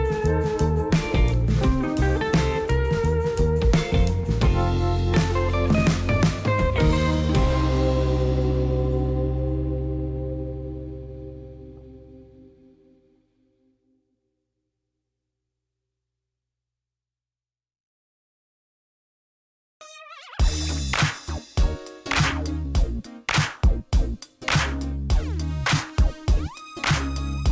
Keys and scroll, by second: 6.1 g, 6.6 x, 11.0 g, 11.4 x, 15.7 n, 19.3 n, 23.6 space, 26.1 space.